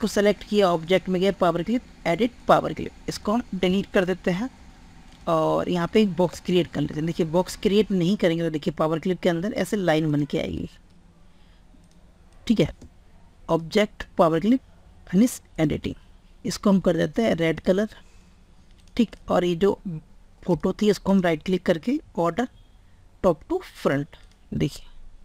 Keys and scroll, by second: 6.7 ctrl+z.